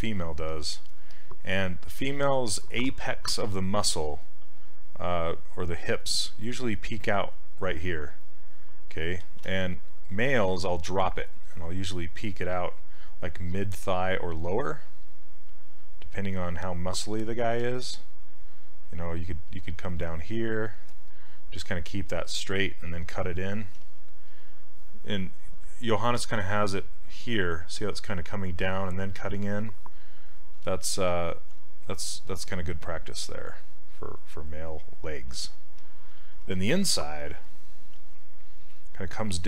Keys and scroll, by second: 2.2 s, 4.5 s, 9.3 ctrl+z, 11.4 s, 14.6-15.4 typing, 17.7 ctrl+z, 23.8 s, 30.7 ctrl+z, 31.1 ctrl+z, 38.0 s.